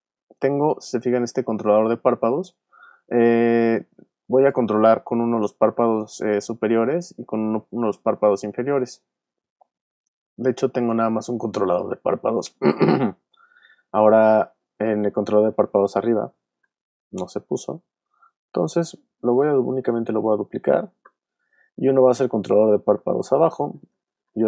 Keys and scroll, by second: 0.6 space, 5.0 space, 16.6 BackSpace, 21.0 super+d, 22.9 Return, 23.3 Right, 23.7 BackSpace.